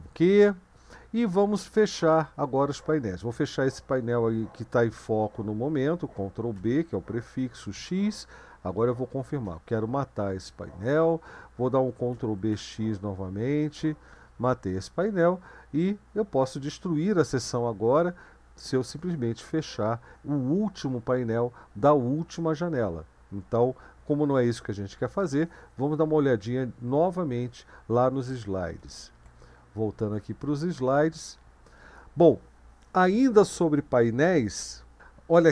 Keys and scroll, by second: 6.6 ctrl+b, 7.7 x, 9.2-9.9 typing, 12.1 ctrl+b, 12.5 x, 13.7 y, 28.8 super+1, 30.3 Right.